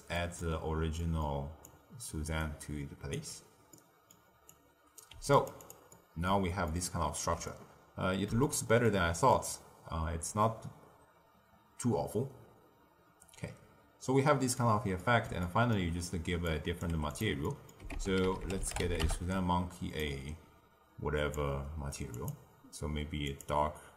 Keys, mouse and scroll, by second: 0.5-0.9 scroll down 2, 0.9-1.6 middle drag, 1.6 click, 2.3 alt+right click, 3.7-4.4 middle drag, 4.4 drag, 5.0 g, 5.6 click, 5.9-12.3 middle drag, 14.9-16.4 middle drag, 16.4 click, 16.8 g, 17.4 middle click, 17.9 ctrl+a, 21.2 click, 22.1-23.5 drag.